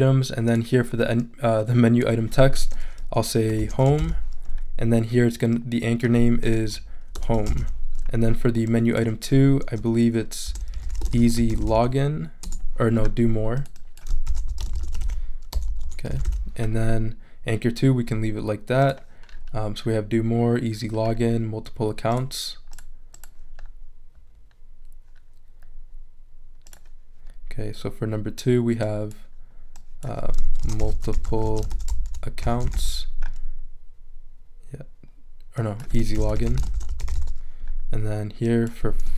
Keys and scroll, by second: 3.3-4.5 typing, 6.4-8.1 typing, 10.2-12.2 typing, 12.4 Return, 14.0-16.7 typing, 30.4-33.2 typing, 35.9-37.6 typing.